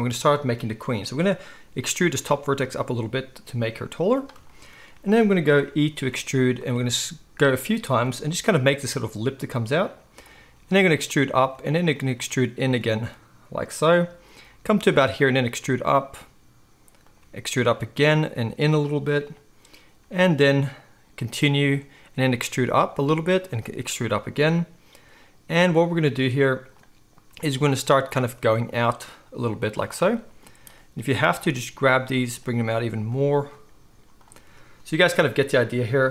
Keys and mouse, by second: 1.7 e, 4.2-6.7 shift+right drag, 5.9 e, 6.7-14.7 drag, 6.7 e, 8.1 e, 10.5 e, 11.5 e, 12.2 e, 12.9 e, 14.7-17.2 right drag, 15.0 e, 17.2-30.7 drag, 17.2 e, 20.0 e, 22.1 e, 23.5 e, 27.3 e, 28.2 e, 31.3 g, 31.9 click, 32.5 g, 33.2 click, 33.7 g, 34.1 click, 34.1 middle click, 34.1-36.1 right drag.